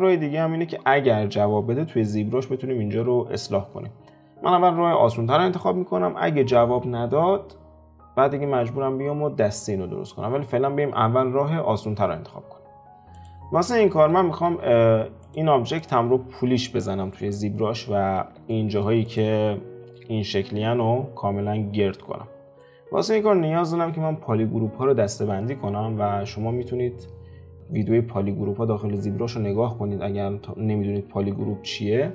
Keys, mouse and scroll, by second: 10.0 scroll down 2, 13.1 click, 13.9 alt+q, 14.5 alt+q, 15.2 click, 15.8 click, 16.8 alt+q, 18.2 alt+q, 18.5 middle click, 19.0 click, 19.8 F4, 20.5-21.7 scroll up 3, 22.1-22.6 scroll down 4, 22.6-25.7 middle drag.